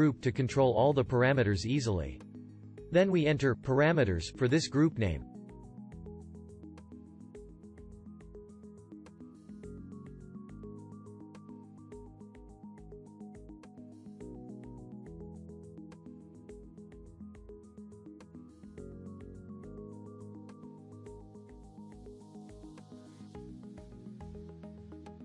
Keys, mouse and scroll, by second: 11.0 ctrl+g.